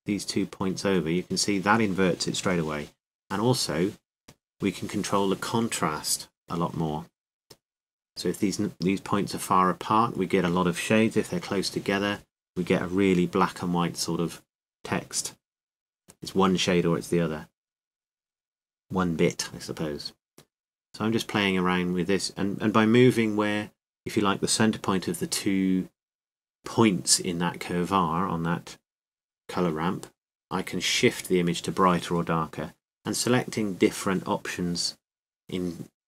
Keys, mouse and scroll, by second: 8.0 click, 8.7 click, 9.2 click, 9.7 middle click, 10.1 middle click, 10.6 middle click, 18.9-27.7 drag, 29.4-35.3 drag.